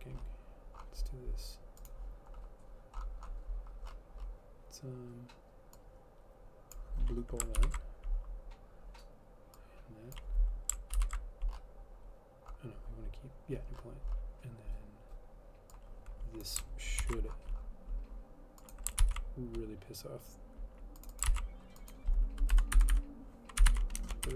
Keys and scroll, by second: 7.7 ctrl+/, 11.1 ctrl+/, 17.2 ctrl+c, 19.2 ctrl+v, 21.4 ctrl+c, 22.7-24.3 typing, 23.1 Delete.